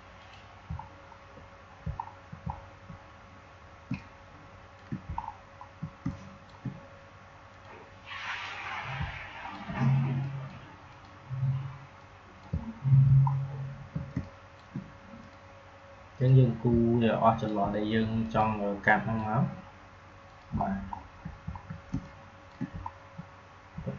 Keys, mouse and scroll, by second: 0.7 alt+scroll down 1, 1.9 alt+scroll up 1, 2.4 alt+scroll down 1, 3.8 space, 5.1 alt+scroll up 1, 5.9 click, 6.3 space, 7.5-12.7 drag, 12.6 scroll down 2, 13.2 alt+scroll up 1, 13.4 typing, 14.1 click, 14.5 space, 15.1-18.1 drag, 18.1 click, 20.6 alt+scroll down 1, 21.5 alt+scroll down 1, 21.8 space, 21.9 click, 22.3 space, 22.8-23.2 alt+scroll up 2, 23.7 alt+scroll up 1.